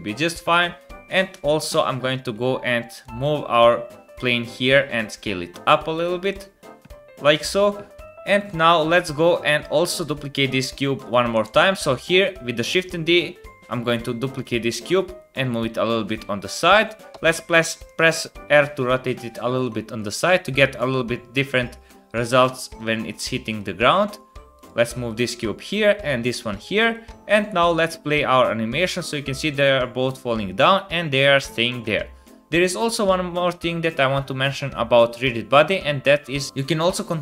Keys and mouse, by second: 1.2 click, 1.4 KP_7, 2.3 g, 3.2 click, 3.7 g, 4.8 s, 6.2 KP_0, 11.1 click, 11.3 KP_1, 11.6 shift+click, 13.3 click, 13.9 shift+click, 14.2 shift+middle click, 14.2 click, 14.4 shift+middle click, 14.6 shift+d, 17.1 r, 18.5 r, 21.8 shift+click, 22.2 r, 23.0 r, 23.8 g, 25.0 click, 25.5 g, 26.3 r, 27.1 space, 27.5 KP_0, 31.9 space, 32.0-35.0 middle drag.